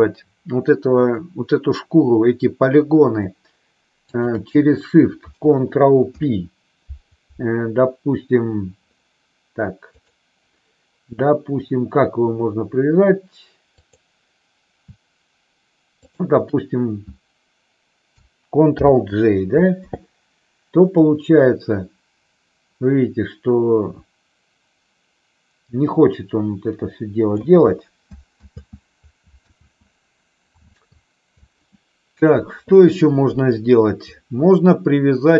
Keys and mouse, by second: 6.0 ctrl+p, 13.6 click, 16.0 shift+click, 18.7 ctrl+j, 21.0-27.4 drag, 28.5 ctrl+z, 29.5 ctrl+z, 30.7 ctrl+z.